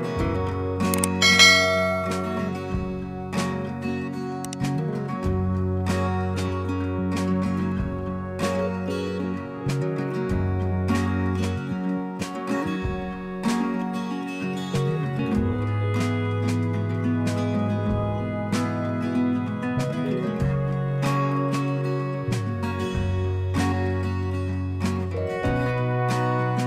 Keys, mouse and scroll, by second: 11.1 click, 12.2 right click, 18.1 click, 22.8 click, 23.7-25.2 drag.